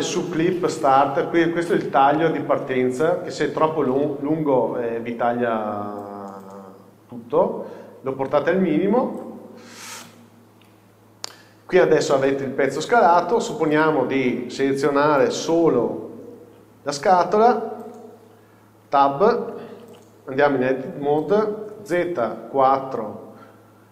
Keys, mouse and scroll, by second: 10.7 n, 12.3-13.9 middle drag, 13.9 click, 15.9 shift+h, 18.0 KP_1, 19.9 a, 22.2 KP_4, 23.6 scroll up 1.